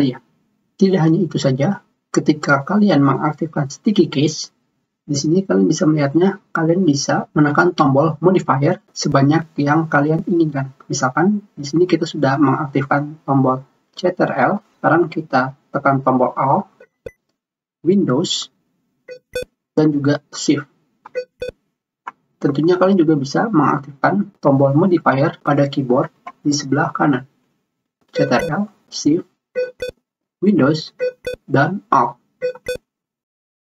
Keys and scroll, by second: 27.2 ctrl+alt+shift+super+Menu.